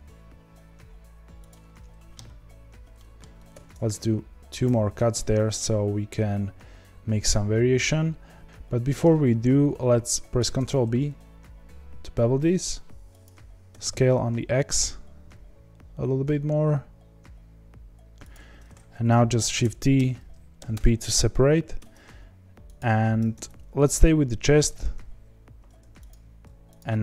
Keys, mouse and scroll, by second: 2.9 middle click, 3.5 ctrl+r, 5.1-10.3 middle drag, 10.3 ctrl+b, 13.7 s, 19.6 shift+d, 20.7 p, 21.7 Tab, 22.7 click, 23.3 Tab, 26.1 alt+click.